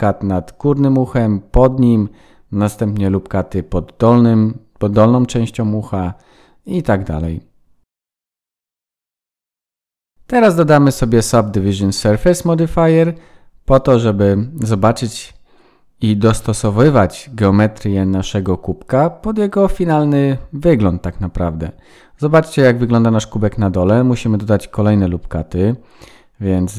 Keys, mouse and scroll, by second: 3.6 ctrl+r, 8.5 ctrl+r, 9.5 ctrl+r, 10.1 shift+middle click, 11.1 click, 13.3 scroll up 1, 13.9-14.5 scroll down 1, 14.5-14.8 scroll down 1, 15.1 click, 16.3 shift+middle click, 16.7 middle click, 20.4 KP_1, 21.5-22.2 scroll up 5, 21.9 Tab, 22.3 shift+middle click, 22.7-23.6 scroll up 3, 23.8 ctrl+r.